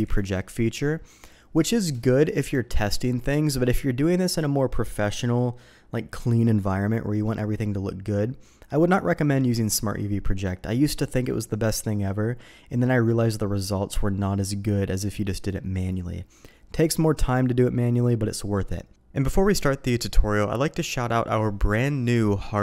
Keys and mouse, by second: 18.9 Tab, 19.0 ctrl+e, 19.3 Tab, 19.3 click, 19.6 h, 19.7 click, 20.1 Tab, 20.1 click, 20.2 click, 20.6 click, 20.8 shift+click, 21.0 ctrl+e, 21.1 click, 21.4 click, 21.8 ctrl+e, 22.1 click.